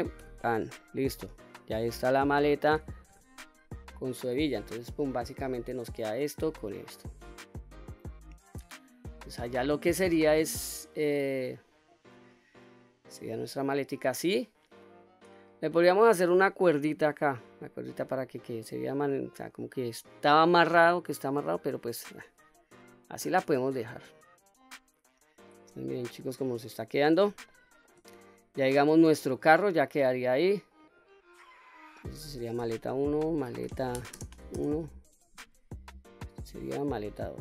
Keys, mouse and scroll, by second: 0.4 scroll down 1, 0.8-1.2 middle drag, 1.5-1.8 scroll down 1, 1.8-2.4 middle drag, 2.8 Tab, 3.2-3.7 scroll down 2, 3.6-4.0 middle drag, 4.5 click, 4.9-5.8 scroll down 2, 5.4-9.0 middle drag, 9.1 scroll down 1, 9.6-10.4 middle drag, 10.8-11.2 middle drag, 11.6-12.5 middle drag, 12.8-13.2 scroll down 2, 13.2-15.4 middle drag, 17.3-17.8 scroll up 1, 17.8-18.3 middle drag, 18.8-21.0 scroll down 1, 21.0-21.3 middle drag, 21.7 click, 22.1-22.5 scroll down 2, 22.5-23.0 middle drag, 23.3-23.6 scroll up 2, 23.7-24.3 middle drag, 25.7-26.3 middle drag, 27.2-27.6 shift+middle drag, 27.9-28.4 middle drag, 28.7-29.4 scroll down 1, 29.4 middle click, 30.6 click, 31.7 click, 31.9-35.3 drag, 36.0 click, 37.3 click.